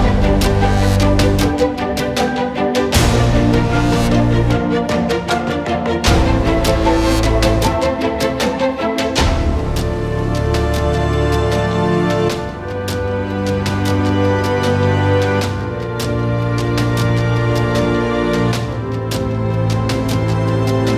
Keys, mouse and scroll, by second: 0.4 click, 0.6 middle click, 1.0 click, 1.3 middle click, 1.6 scroll up 1, 1.7 click, 2.7 right click, 3.4 click, 3.5-3.9 right drag, 3.9 click, 4.0 right click, 4.3 click, 5.1 scroll up 2, 5.4 click, 5.7 middle click, 5.9 z, 7.2 click, 7.3 scroll up 1, 7.4 alt+click, 7.6 scroll down 1, 7.7-8.0 alt+middle drag, 8.0-8.4 drag, 8.6 scroll down 1, 8.7-10.2 drag, 10.2 middle click, 10.4-11.0 alt+drag, 11.0 alt+middle click, 11.4 s, 13.8-15.6 alt+drag, 15.6-16.0 scroll down 9, 16.0-17.8 drag, 17.8-18.1 scroll up 3, 18.1 click, 20.0-20.9 scroll down 17, 20.4-20.9 drag.